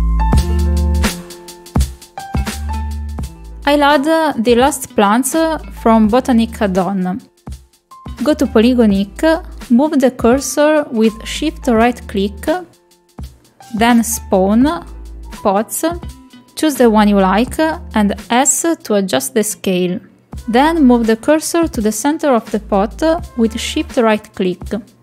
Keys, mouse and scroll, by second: 0.4 click, 0.7-1.7 drag, 1.9 click, 2.5 click, 2.7 click, 3.2 click, 3.8 click, 10.3 middle click, 10.6 shift+middle click, 10.8-11.2 middle drag, 11.5 shift+middle drag, 12.5 shift+right click, 14.9-18.3 drag, 19.2 s, 21.7 middle click, 22.9 shift+click, 23.5-25.0 drag.